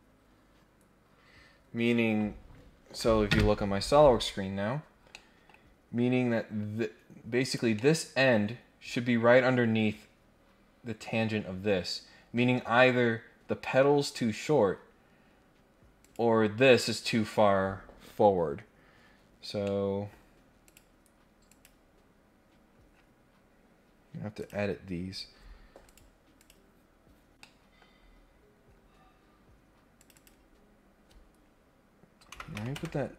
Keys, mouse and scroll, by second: 4.5 scroll down 2, 4.7 scroll up 2, 5.1 middle click, 5.6 scroll down 2, 7.4 click, 7.7 middle click, 12.5 scroll down 2, 15.2 scroll up 2, 16.0 click, 18.5-19.3 scroll down 2, 19.3-19.7 scroll up 2, 19.6 middle click, 20.1 scroll down 1, 20.6 click, 21.5 click, 22.6-23.4 scroll up 2, 23.4 scroll up 1, 24.4 click, 25.8 click, 26.3 click, 27.4-27.8 scroll down 1, 27.8 scroll up 1, 27.9-28.4 scroll down 2, 28.5 scroll up 1, 28.7 scroll down 1, 28.8-29.4 scroll up 2, 30.0 click.